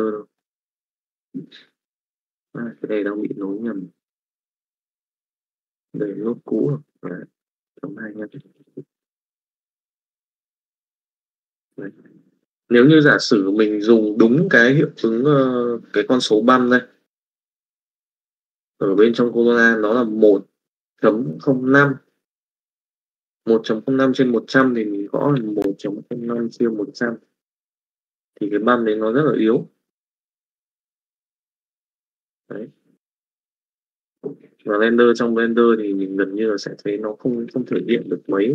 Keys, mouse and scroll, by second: 0.4-1.5 middle drag, 2.5 click, 2.7-3.8 drag, 4.1-5.1 middle drag, 6.1 middle click, 6.6 middle click, 7.7 click, 9.3 middle click, 10.7-11.8 drag, 25.0-26.9 drag, 26.7 KP_0, 27.9 middle click, 28.8-30.8 middle drag, 31.2 middle click, 33.6-37.0 drag, 37.1-38.2 drag.